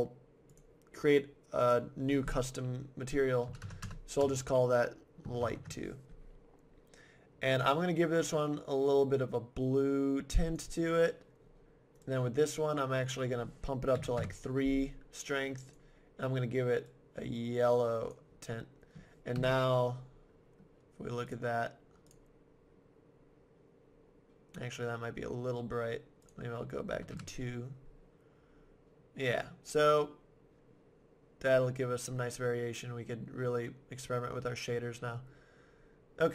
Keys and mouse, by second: 0.5-2.3 drag, 7.5-9.3 drag, 12.0-13.0 right drag, 13.0 middle click, 13.7-14.7 drag, 14.8 click, 15.7-17.5 drag, 19.3 KP_0, 20.1-21.3 middle drag, 22.0 click, 26.2-28.0 middle drag.